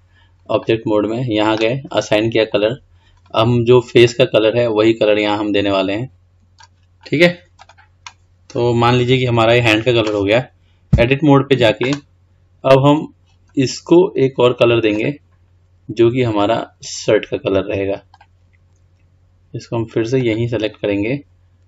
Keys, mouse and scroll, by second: 0.8-2.8 drag, 7.8 click, 11.2 Tab, 15.1-18.4 drag.